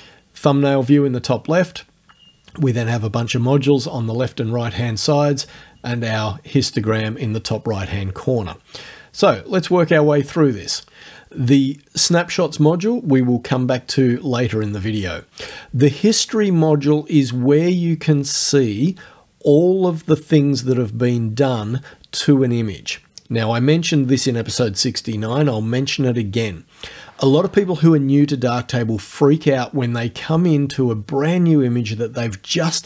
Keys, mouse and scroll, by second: 15.5 click.